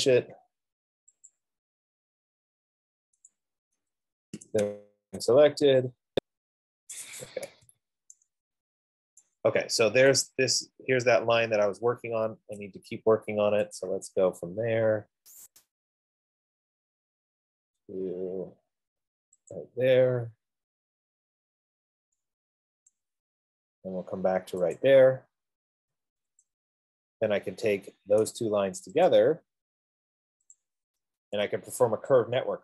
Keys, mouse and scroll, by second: 0.0 Return, 1.5 click, 3.6 click, 5.2 z, 5.7 Return, 6.2 Return, 6.2 s, 7.4 middle click, 7.9 Escape, 9.5 right click, 9.6-10.4 typing, 10.6 click, 11.9 middle click, 12.1 middle click, 14.3 click, 15.7 click, 18.4 middle click, 18.6-19.1 scroll, 19.9 click, 20.4-21.0 scroll down 9, 21.3 scroll down 3, 21.5-22.1 scroll, 23.3 right click, 23.7 scroll, 25.3 click, 26.6 Return, 27.5 scroll, 29.4 shift+click, 31.0 shift+click.